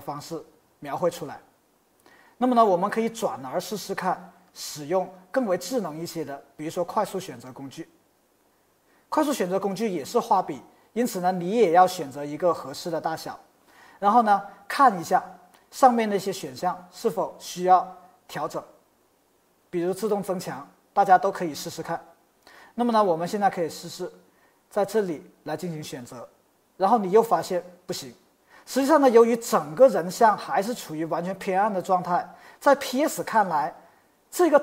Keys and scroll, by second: 13.0 typing.